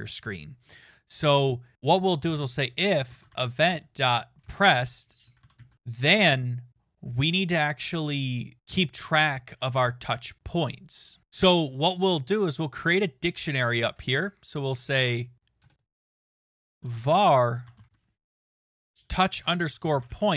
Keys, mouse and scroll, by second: 1.9-6.3 typing, 13.0 click, 13.9 Return, 14.7 BackSpace, 15.0 BackSpace, 15.6 Return, 15.9 Down, 16.1-20.3 typing.